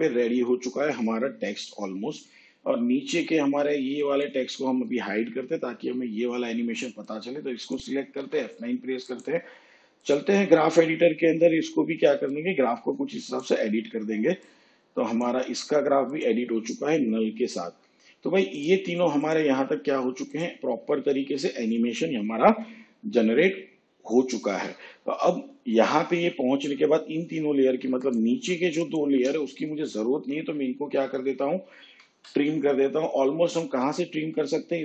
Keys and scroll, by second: 8.2 F9, 31.9 alt+].